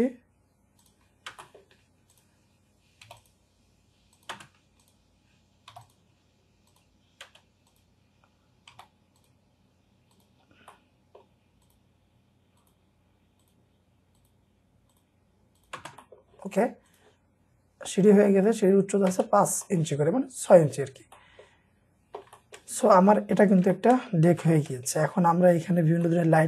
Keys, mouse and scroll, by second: 1.1 scroll down 1, 1.3 typing, 1.4 middle click, 1.6 scroll down 1, 1.8-2.3 scroll up 1, 3.1 typing, 4.6-5.3 scroll up 1, 5.3-5.7 typing, 8.8 typing, 10.4-10.7 scroll down 1, 10.7 middle click, 15.8 space, 16.0 middle click, 19.1 space, 19.4 scroll down 1, 19.7 middle click, 19.9-20.3 scroll down 1, 20.5 middle click, 22.8 shift+middle click, 24.4-25.4 scroll up 3, 24.5 shift+middle click, 25.7-26.0 scroll down 1, 26.1 middle click.